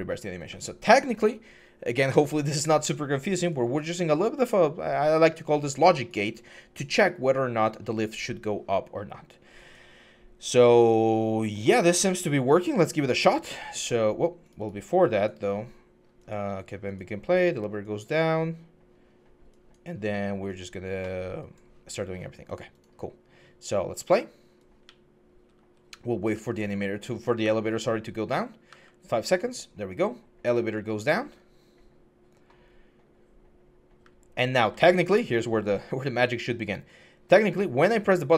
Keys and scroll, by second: 24.6-27.4 typing, 28.5 w, 33.8-36.4 typing.